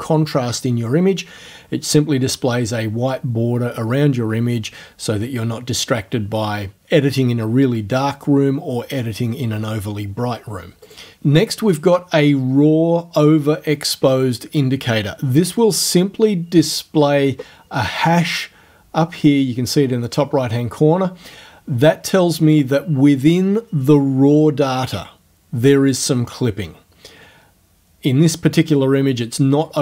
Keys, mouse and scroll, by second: 10.9 click, 16.7 click.